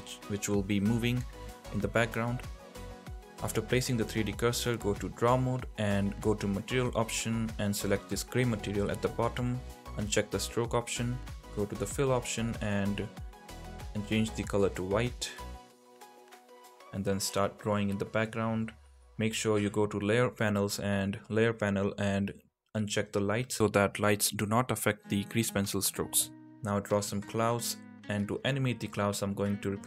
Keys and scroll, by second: 18.8 ctrl+z, 23.6 ctrl+z, 25.3 ctrl+z, 27.7 ctrl+z.